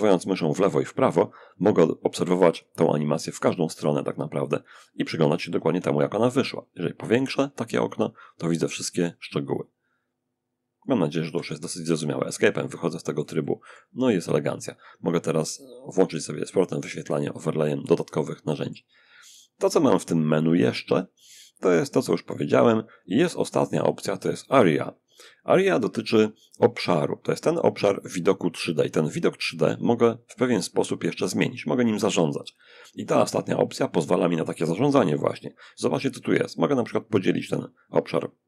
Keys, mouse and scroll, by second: 5.3-6.9 alt+right drag, 7.1-10.6 alt+drag, 10.5 Escape, 11.8-14.4 drag, 14.8 click, 15.6-18.5 shift+middle drag, 19.1 click, 31.8 click.